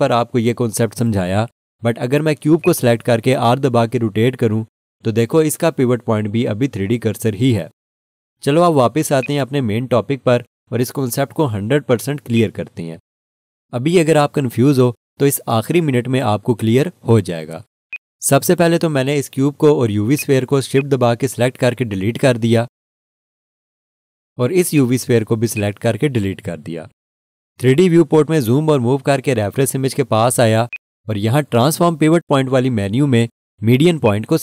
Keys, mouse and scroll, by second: 9.2 right click, 12.3 alt+shift+click, 17.9 click, 24.6 Delete, 24.7 alt+shift+click, 25.7 click, 26.7 Delete, 29.2-30.4 scroll up 1, 30.7 alt+shift+click.